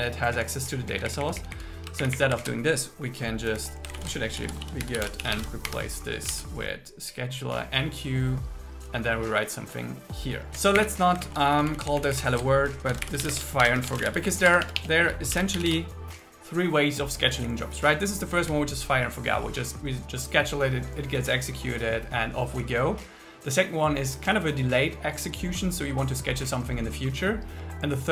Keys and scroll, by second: 0.3 Down, 2.1 shift+Up, 2.5 shift+super+Left, 3.5 Left, 3.9 alt+shift+Right, 5.7 Escape, 6.3 super+s, 10.5 Down, 11.0 Up, 11.3 super+Right, 11.6 Left, 12.9-14.4 typing, 14.5 Delete, 15.2 Delete, 18.5 Down.